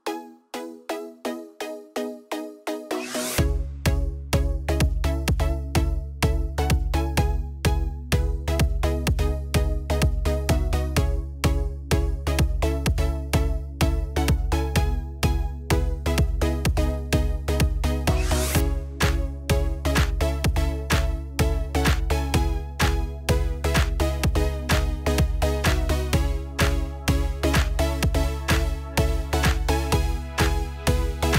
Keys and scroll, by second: 30.6 ctrl+a.